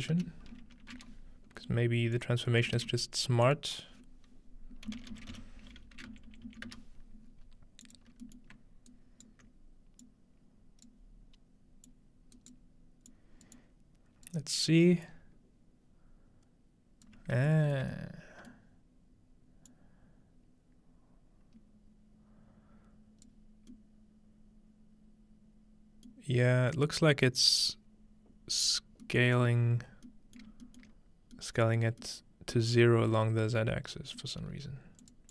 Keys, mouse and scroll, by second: 0.0-0.7 typing, 2.1 click, 2.5 middle click, 2.8 shift+a, 3.5 click, 4.9-6.4 typing, 7.8-9.6 drag, 8.1-8.9 scroll down 1, 8.3-8.9 middle drag, 10.0-14.3 drag, 12.4-12.7 right drag, 15.1-17.1 drag, 17.5-18.0 shift+drag, 17.5-20.4 shift+middle drag, 19.7-25.2 drag, 26.3-28.5 middle drag, 28.5-29.8 scroll down 1, 29.2 middle click, 30.4 shift+middle drag, 30.7 shift+middle click, 31.1-32.5 scroll down 1, 31.8-32.8 shift+middle drag, 34.2-35.3 middle drag, 34.6-35.3 scroll up 1, 35.0-35.3 drag.